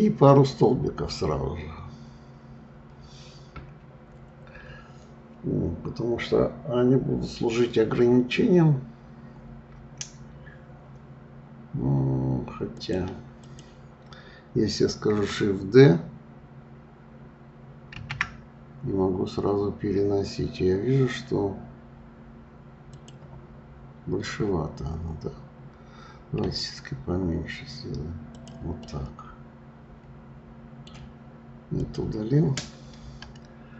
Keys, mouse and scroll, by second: 12.7 click, 13.4 click, 17.9 shift+d, 28.8-31.8 middle drag, 31.8 click, 33.0 Delete.